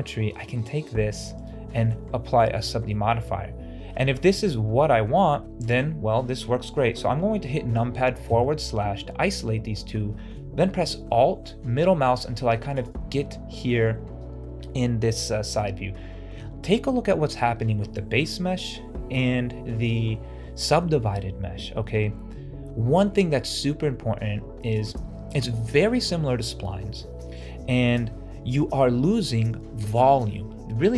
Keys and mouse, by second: 1.3 click, 1.7 shift+middle click, 2.8-3.8 middle drag, 5.5 shift+click, 9.1-10.0 middle drag, 11.0-12.6 middle drag, 13.2 middle click.